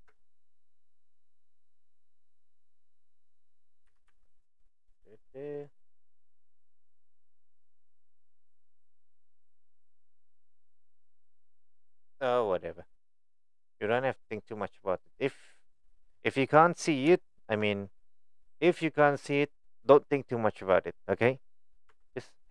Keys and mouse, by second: 0.0 KP_1, 3.9 g, 13.3 click, 13.9 click, 14.6 middle drag, 16.4-16.9 middle drag, 17.2 shift+middle drag, 21.9 Tab, 22.0 middle click.